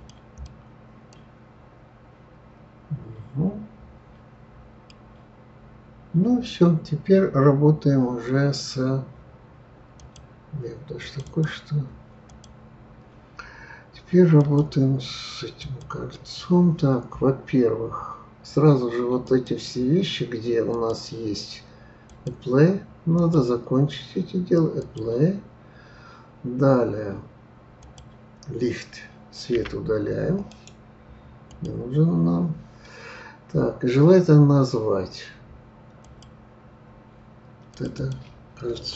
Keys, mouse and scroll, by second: 0.4-3.4 middle drag, 5.0-8.1 scroll down 2, 9.9 click, 11.0 click, 11.2 click, 12.3 click, 14.3 click, 15.6 click, 19.2 click, 20.7 click, 22.1 click, 23.1 click, 24.8 click, 27.8 click, 29.5 Delete, 30.5-33.5 right drag, 36.0 click, 37.7 click, 37.9-38.9 drag.